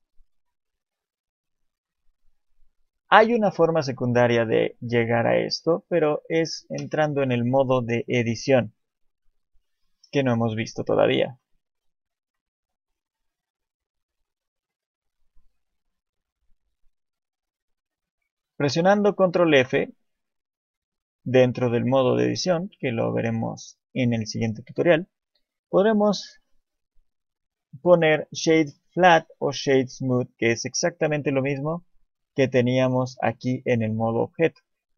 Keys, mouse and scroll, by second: 6.8 Tab, 10.2 click, 11.1-12.2 scroll up 1, 12.2 ctrl+f, 15.3 Escape, 19.4 ctrl+f, 34.7 click.